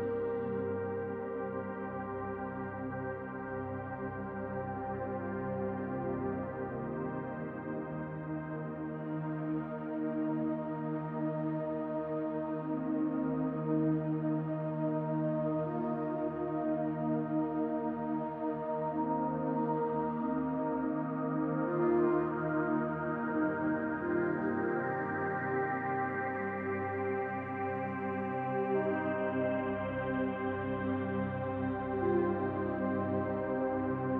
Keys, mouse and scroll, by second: 2.7-3.2 scroll up 4, 3.2 shift+middle click, 3.7-4.3 scroll up 2, 4.3 shift+middle click, 5.4 middle click, 5.9-6.7 scroll down 7, 6.7 middle click, 7.3 middle click, 8.1 middle click, 10.3 click, 12.0 click, 15.2 click, 19.3 click, 19.9 middle click, 25.4 middle click, 26.5-26.9 scroll up 5, 27.1 shift+middle click, 28.1 click, 28.6 middle click, 30.8 KP_Decimal, 31.8 middle click, 33.3 click.